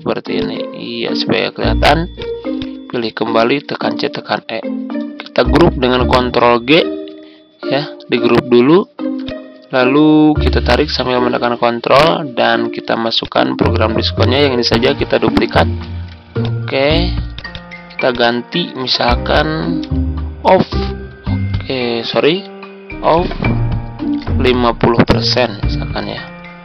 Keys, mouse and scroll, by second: 0.3 ctrl+click, 1.5-2.1 scroll down 1, 2.1 click, 3.6-4.0 typing, 6.4 ctrl+g, 9.1-11.3 ctrl+drag, 11.8 click, 15.8 ctrl+d, 16.3 click, 18.5 ctrl+a, 19.8-20.9 typing, 22.1-23.2 typing, 24.2 Return, 24.9-25.3 typing.